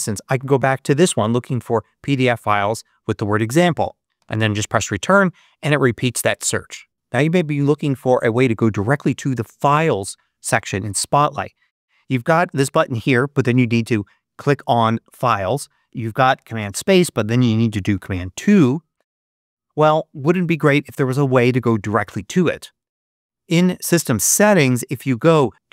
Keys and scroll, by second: 4.1 Return, 16.5 super+space, 17.8 super+2.